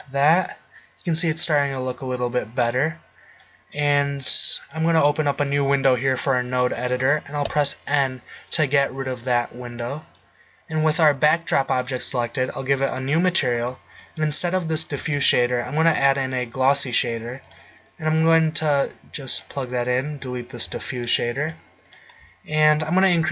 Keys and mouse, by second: 7.4 n, 11.4-11.9 right drag, 12.8 click, 15.0 shift+a, 20.7 x, 21.5 g, 22.0-23.1 drag.